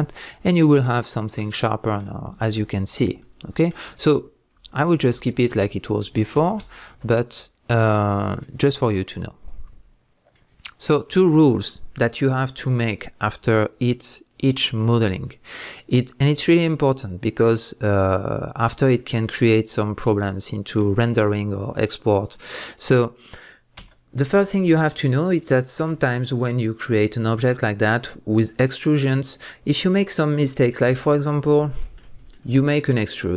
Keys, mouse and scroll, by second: 0.0 Tab, 0.2-33.1 middle drag, 3.9 Tab, 5.3 ctrl+z, 31.3 scroll up 1, 33.1 alt+click.